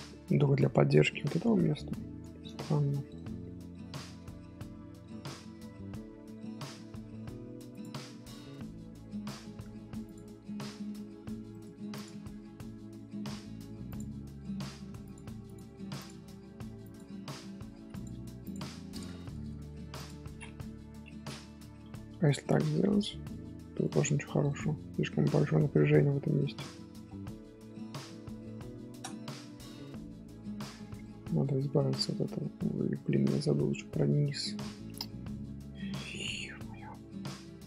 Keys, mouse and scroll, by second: 0.7 Tab, 1.2 Tab, 1.6-2.9 middle drag, 2.9 Tab, 3.3-3.8 scroll down 1, 3.8-4.1 middle drag, 4.1-5.1 scroll up 3, 5.1-5.7 scroll up 1, 5.7 Tab, 6.0-6.8 middle drag, 6.8-7.7 scroll up 4, 7.7 click, 7.9 scroll down 2, 8.5-8.9 middle drag, 8.9 scroll up 2, 10.0 click, 11.9 click, 15.4 click, 15.9 click, 16.4 g, 18.4 click, 20.2 scroll down 1, 20.7 KP_7, 21.0 scroll up 3, 21.5 shift+middle click, 22.5 g, 24.1 ctrl+z, 24.2-25.4 ctrl+z, 27.8 scroll down 2, 28.5 scroll down 8, 28.8-29.2 shift+middle drag, 29.2 Tab, 29.6 Tab, 29.7-30.4 scroll up 2, 29.9 middle drag, 30.4-31.5 shift+middle drag, 31.5 Tab, 32.6 Tab, 32.9-33.9 middle drag, 33.9 Tab, 34.8 shift+middle click, 35.3-36.1 scroll up 3, 35.8 shift+middle click, 36.8 scroll up 1, 36.9 scroll down 3.